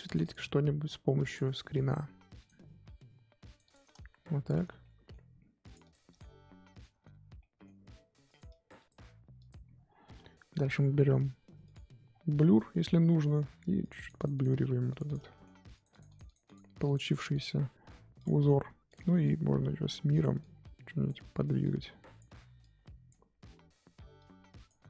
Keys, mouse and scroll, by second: 4.8 shift+middle click, 5.6 click, 6.4-8.2 shift+middle drag, 8.2-10.0 drag, 10.0-10.5 scroll down 3, 10.5-11.7 scroll up 2, 11.7 click, 12.0-13.0 scroll down 4, 13.0 scroll down 2, 13.3-13.8 scroll up 6, 13.8-15.3 drag, 15.3 shift+middle click, 15.7-18.5 drag, 18.5 f, 19.2-24.8 drag.